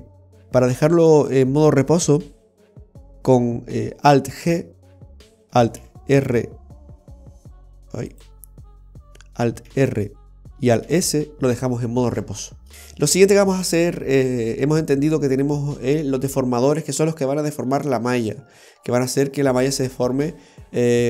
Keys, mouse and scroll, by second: 4.4 alt+g, 5.8 alt+e, 9.7 alt+r, 10.9 alt+s, 12.6 scroll up 2, 12.7 click, 12.7-13.0 scroll down 2, 13.2 shift+middle click.